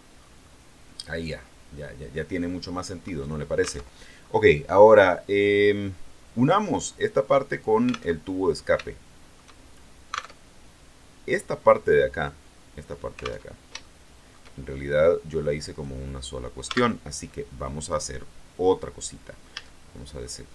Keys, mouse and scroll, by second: 0.3-2.6 middle drag, 3.8 alt+Tab, 8.1 alt+Tab, 8.8 shift+middle click, 9.6 shift+scroll up 1, 10.2 alt+Tab, 13.4 alt+Tab, 13.7 alt+shift+middle click, 14.6 shift+scroll up 1, 15.6 right click, 16.6 Tab, 18.6 right click, 19.4 a, 20.1 right click.